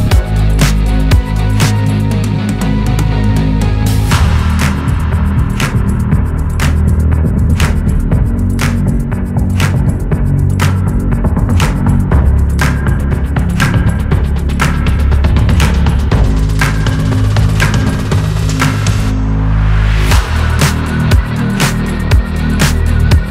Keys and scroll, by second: 15.4 ctrl+d, 22.4 Left.